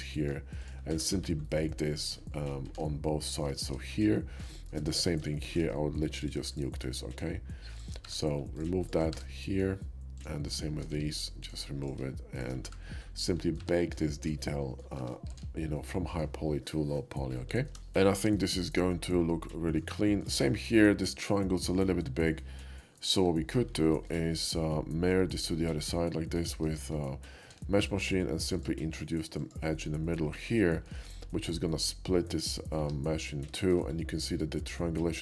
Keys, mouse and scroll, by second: 0.0 click, 0.7 ctrl+click, 0.9 1, 1.2 middle click, 2.4 middle click, 3.1 alt+x, 3.1 middle click, 3.6 shift+middle click, 4.2 shift+middle click, 4.6 shift+middle click, 4.8 shift+middle click, 5.2 shift+middle click, 5.4 shift+middle click, 6.2-8.1 shift+drag, 8.1 1, 8.5 click, 9.2 1, 9.3 middle click, 10.1 click, 10.5 shift+click, 10.9 x, 11.4 click, 11.9 click, 12.4 shift+click, 12.7 1, 12.9 middle click, 13.4 click, 13.7 Tab, 14.1 shift+middle click, 14.4 middle click, 15.0 Tab, 15.8 alt+x, 15.8 middle click, 16.2 Tab, 17.5 F2, 17.8 shift+middle drag, 18.4-19.8 shift+middle drag, 20.1 shift+middle click, 23.2 k, 23.9 middle click, 24.2-25.3 middle drag, 26.4 alt+x, 26.4 alt+right click, 26.7 Tab, 27.4 alt+x, 28.5 alt+click, 29.4 alt+click, 30.8 shift+middle click, 32.8 Tab, 33.6 shift+middle drag.